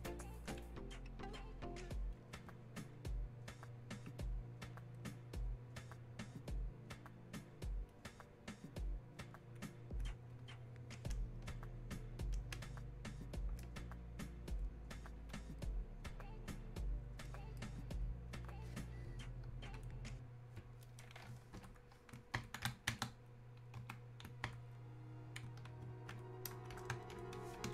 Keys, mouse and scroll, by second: 12.5 ctrl+space, 15.3-17.3 drag, 17.3-23.8 drag, 23.8 Escape, 27.4 Escape.